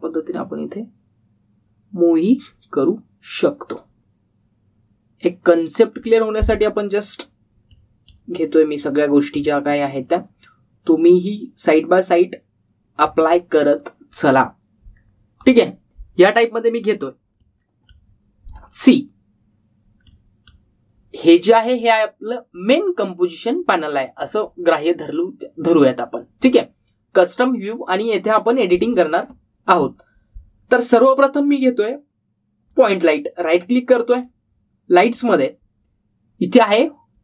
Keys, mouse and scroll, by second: 7.6-8.6 scroll down 1, 8.7-9.2 middle click, 10.3-14.0 drag, 15.5-16.3 scroll down 1, 16.3 click, 18.3-19.0 middle click, 19.5 click, 20.3-21.0 scroll up 1, 21.0-21.6 middle drag, 27.4 click, 29.1-29.7 scroll down 1, 29.7 click, 33.7 right click, 35.0 click.